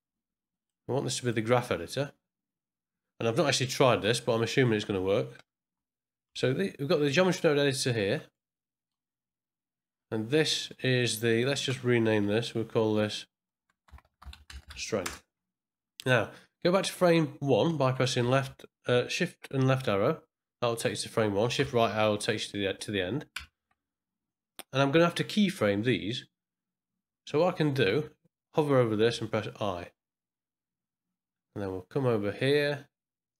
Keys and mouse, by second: 1.2-4.1 drag, 5.6 n, 8.3 middle click, 11.2 click, 12.2 n, 13.5-15.3 drag, 15.3 n, 18.4 shift+click, 21.6 shift+Right, 23.3 shift+Left, 29.1 i, 32.3-33.3 middle drag.